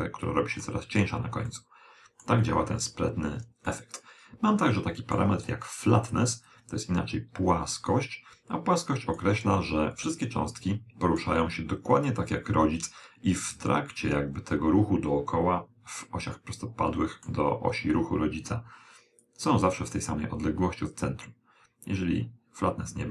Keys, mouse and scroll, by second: 1.6-3.3 middle drag, 3.7-5.4 middle drag, 6.5 click, 10.1-11.8 middle drag, 16.0-17.8 middle drag, 19.3 click.